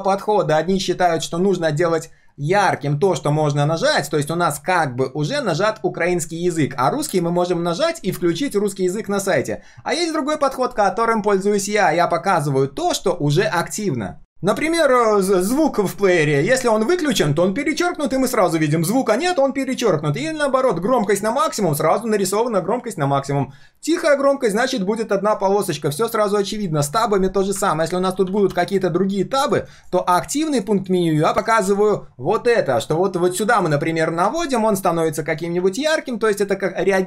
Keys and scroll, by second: 28.0 ctrl+d, 28.2 ctrl+d, 28.4 ctrl+d, 29.7 ctrl+alt+c, 31.6 ctrl+alt+v.